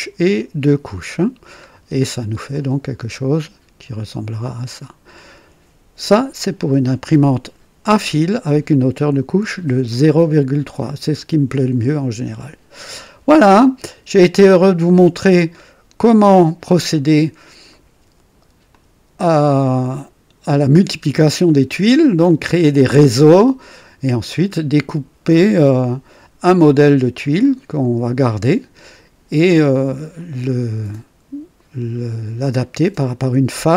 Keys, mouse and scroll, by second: 1.6-2.2 scroll down 2, 2.5-5.3 drag, 14.4 click, 16.0-17.0 drag, 17.2 scroll down 2, 17.6 right click, 18.7-24.6 drag, 27.4 click, 30.1 click.